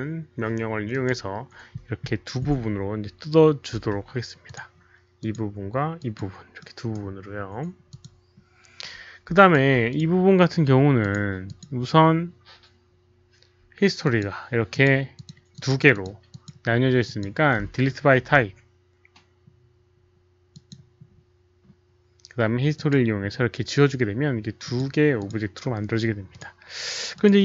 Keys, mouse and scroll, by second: 0.9 click, 3.7 q, 4.4 click, 5.1 click, 5.9 click, 6.1 q, 6.5-6.9 right drag, 7.6 right click, 7.6 q, 7.8 click, 8.6 q, 9.3 alt+click, 9.8 alt+click, 10.9 click, 11.4 alt+click, 14.0 alt+click, 14.0 right click, 14.0 q, 14.6 alt+click, 14.6 right click, 15.1 click, 15.2 right click, 15.5 click, 15.8 click, 16.2 click, 17.0 click, 18.3 click, 18.6 click, 19.6 click, 20.4 click, 22.7 click, 24.6 click, 25.1 click, 26.2 click, 27.1 click.